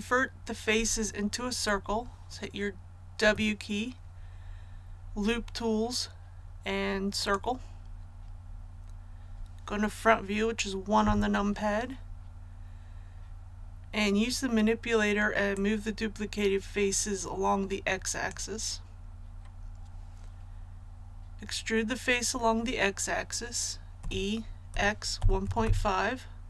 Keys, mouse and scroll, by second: 3.1 w, 7.1 click, 11.0 KP_1, 15.5-19.1 drag, 23.9-25.6 typing.